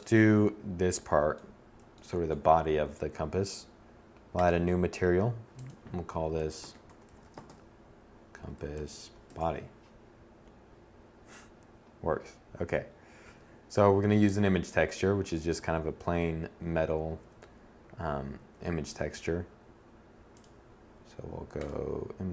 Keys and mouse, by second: 6.2 s.